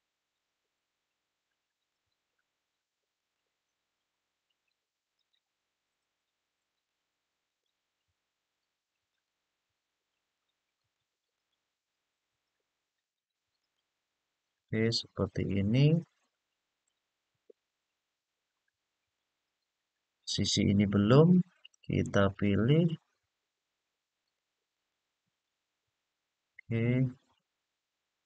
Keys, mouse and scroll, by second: 0.4-1.6 scroll up 2, 2.9 alt+shift+click, 4.9 alt+shift+click, 6.5 alt+shift+click, 7.2 alt+shift+click, 8.8 alt+shift+click, 10.5 alt+shift+click, 11.1 alt+shift+click, 12.7 alt+shift+click, 13.3 alt+shift+click, 14.1-15.6 scroll down 2, 15.6-16.6 middle drag, 17.2-18.9 middle drag, 19.4-20.5 scroll up 2, 21.9 alt+shift+click, 22.4 alt+shift+click, 23.9 alt+shift+click, 24.4 alt+shift+click, 25.3 scroll down 2, 27.2-27.6 scroll down 1, 28.0-28.2 middle drag.